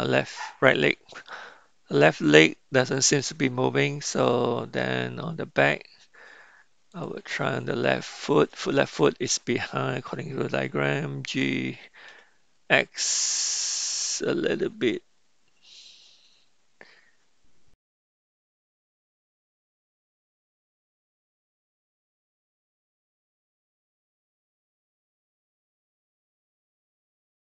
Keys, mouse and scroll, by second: 6.9 click, 11.3 g, 19.5 r, 20.3 click, 21.0 r, 21.8 click, 23.9 g, 25.3 drag, 25.9 g, 26.5 r.